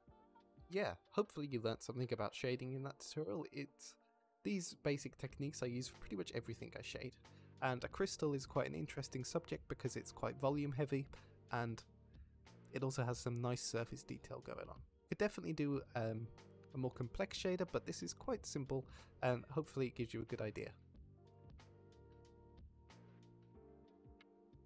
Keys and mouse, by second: 2.5-3.4 middle drag, 4.5 middle click, 5.7 middle click, 7.0 ctrl+s, 8.4-9.1 middle drag, 9.8 middle click, 11.0 drag, 11.4 ctrl+s, 12.1 drag, 13.2 click, 14.1 shift+drag, 14.8 ctrl+s.